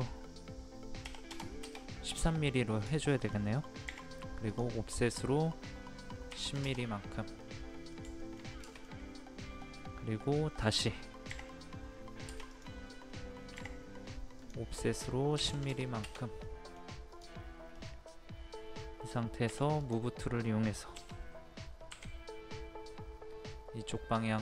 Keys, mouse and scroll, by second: 1.0 KP_5, 2.6 middle click, 3.0 shift+middle click, 4.5 click, 6.3 KP_1, 7.4 middle click, 8.2 shift+middle click, 8.7-9.8 middle drag, 11.3 o, 12.5 click, 13.6 o, 14.4 click, 15.4 KP_1, 16.4 middle click, 17.1 click, 17.8-18.8 middle drag, 19.5 m, 19.8 click, 20.9 Left, 21.9 Right.